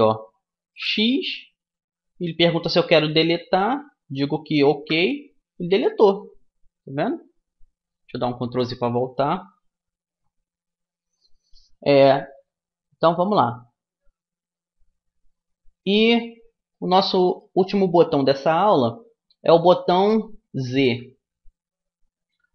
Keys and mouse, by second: 0.2 x, 7.3 ctrl+z, 16.2-19.9 middle drag, 21.1 z, 22.2 z.